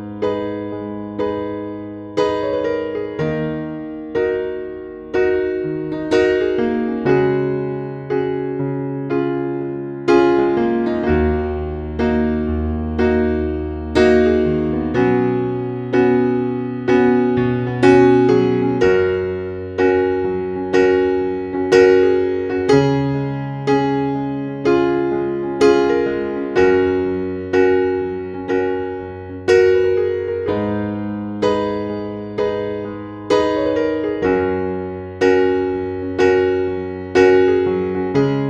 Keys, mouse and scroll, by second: 4.3-6.1 scroll down 1, 6.2-12.6 drag, 13.6 scroll up 1, 14.2 click, 32.1 scroll down 1, 32.7 click, 33.2-33.6 scroll up 1, 33.6-35.4 scroll down 1, 35.4-38.4 drag.